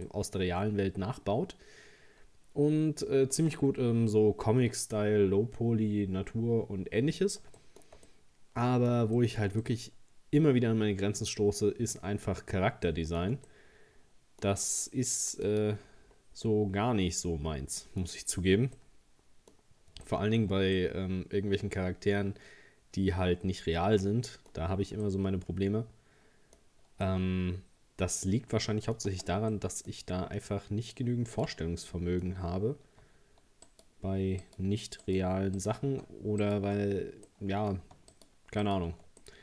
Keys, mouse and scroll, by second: 0.1-3.2 middle drag, 7.6-12.6 shift+middle drag, 12.9-15.5 shift+middle drag, 15.5 click, 16.1-16.5 scroll down 4, 16.5-18.2 middle drag, 18.2-18.8 scroll up 2, 18.8-19.8 middle drag, 19.8 scroll up 1, 20.1-23.8 shift+middle drag, 24.7-25.1 scroll down 1, 25.1-26.6 middle drag, 26.6-27.1 scroll up 2, 27.1-29.1 middle drag, 29.1 Tab, 29.5 middle click, 30.0-31.4 scroll up 1, 31.4 right click, 31.8 middle click, 32.3-32.8 scroll up 2, 33.7 alt+shift+right click, 34.4 alt+shift+right click, 35.1 alt+shift+right click, 35.6 alt+shift+right click, 36.4 shift+right click, 36.9-37.3 scroll down 2, 37.3 middle click, 38.1 alt+shift+right click, 38.6 alt+shift+right click, 39.2-39.4 middle drag.